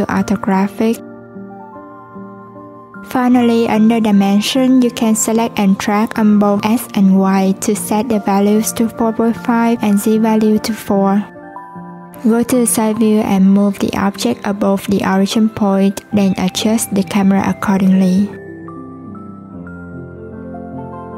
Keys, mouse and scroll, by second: 0.2-2.1 drag, 4.4-7.5 drag, 8.8-10.1 drag, 12.3 click, 13.4 click, 16.5 click, 17.6 click, 19.0 g.